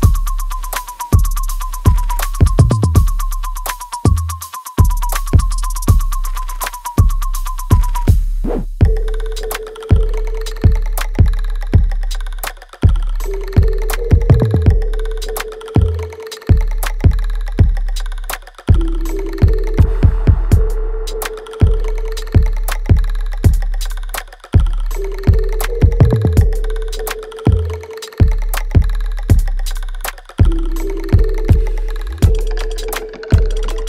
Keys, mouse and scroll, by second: 0.7 alt+right click, 1.2 alt+click, 1.7 alt+right click, 2.4 click, 3.5 ctrl+s, 5.1 right click, 6.2 alt+right click, 6.9 click, 9.3 ctrl+b, 10.5-11.9 drag, 11.9-16.9 ctrl+drag, 16.9 right click, 18.4 alt+right click, 19.1 click, 19.4 alt+right click, 20.0-21.5 alt+drag, 21.9 alt+middle click, 22.2 alt+right click, 23.3 ctrl+s, 23.9 alt+middle click, 24.6-26.4 alt+right drag, 26.4 click, 27.4 shift+click, 29.3 ctrl+z, 29.8 shift+click, 30.7 alt+right click, 31.0 alt+click, 31.6 alt+middle click, 32.1 alt+right click, 33.1 shift+click.